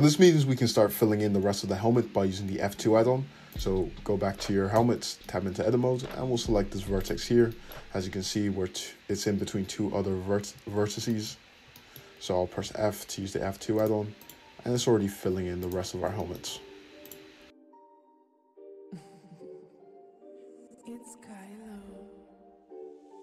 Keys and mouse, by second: 3.5-4.7 middle drag, 3.5-4.7 right drag, 4.7 Tab, 7.0 middle click, 7.0 right click, 10.0 `, 10.7 `, 12.5 f, 13.8 middle click, 14.2 click, 14.7 f, 17.0-23.2 drag, 18.0 f, 19.8 Tab, 21.3 `, 22.2 `, 23.0 Tab.